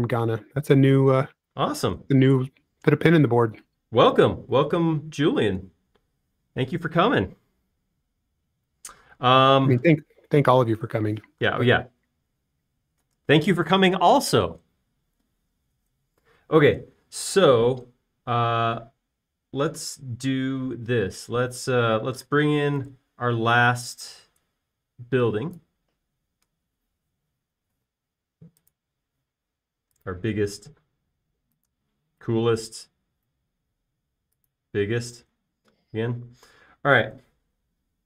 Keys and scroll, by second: 3.2 BackSpace, 24.0 super+s, 36.7 space.